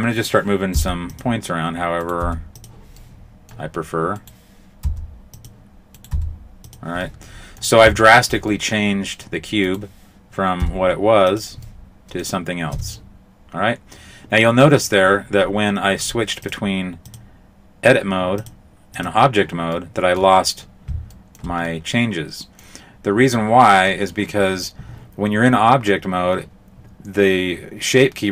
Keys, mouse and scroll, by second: 0.7 g, 2.0 right click, 2.2 g, 3.0 middle click, 4.2 right click, 4.8 g, 6.0 right click, 6.2 g, 7.0 middle click, 8.0 shift+middle click, 8.5 middle click, 9.6 right click, 10.6 g, 11.6 middle click, 12.7 Tab, 16.4 click, 18.4 click, 19.8 middle click, 21.1 shift+middle click, 21.7 middle click, 23.3 middle click, 25.5 middle click.